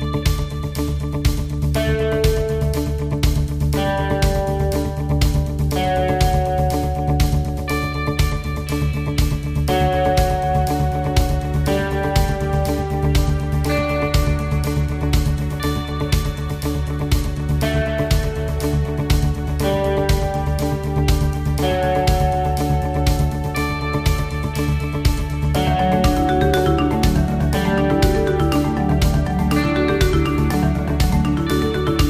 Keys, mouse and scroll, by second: 0.2 middle click, 2.9 click, 5.2 click, 6.1 click, 7.0 click, 7.7 click, 11.9 click, 13.4 KP_0, 15.4 middle click, 16.8 right click, 18.2 click, 21.6 scroll down 1, 22.2 middle click, 22.8 scroll up 2, 23.2 middle click, 26.5 click, 28.7 click, 28.9 click, 30.0 click, 31.8 scroll down 1.